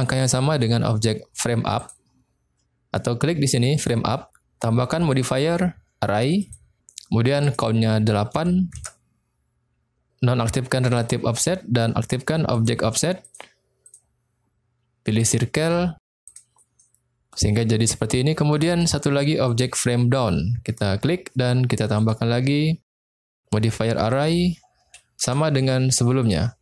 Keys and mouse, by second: 1.8 click, 3.6 click, 5.2-6.6 drag, 7.4-9.1 drag, 10.9 click, 12.5 click, 13.2 click, 13.9-15.3 drag, 16.9 middle click, 18.6 middle click, 19.4 click, 22.0-23.0 drag, 24.1-25.4 drag, 26.2 click.